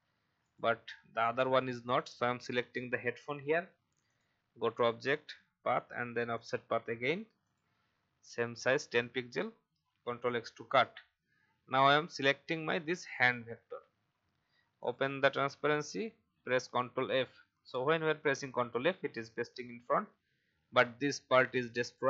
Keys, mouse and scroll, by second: 10.1 ctrl+x, 13.0 click, 17.0 ctrl+f, 21.2-21.9 alt+scroll down 1.